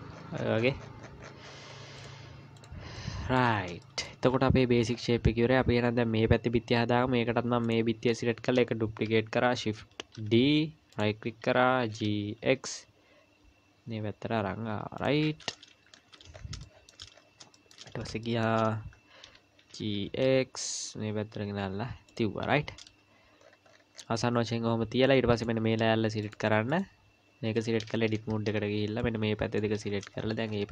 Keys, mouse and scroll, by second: 0.1-2.0 scroll down 45, 2.0 click, 2.6 click, 3.0 middle click, 3.8 middle click, 4.3 KP_1, 4.9-5.4 scroll up 3, 5.5 scroll up 3, 7.6 click, 10.1 shift+d, 11.9 g, 15.8 KP_Decimal, 16.3 scroll up 5, 16.6 shift+middle click, 17.1-18.1 scroll up 4, 17.5 shift+middle click, 18.2 shift+middle click, 18.5-19.4 scroll up 1, 19.4 scroll up 1, 19.7 g, 23.4-25.4 scroll down 15, 25.4 click, 25.4 scroll down 1, 26.2 click, 27.7-28.5 scroll up 4, 28.2 Tab, 28.5-29.7 scroll down 3, 29.0 click, 29.8-30.7 scroll up 21.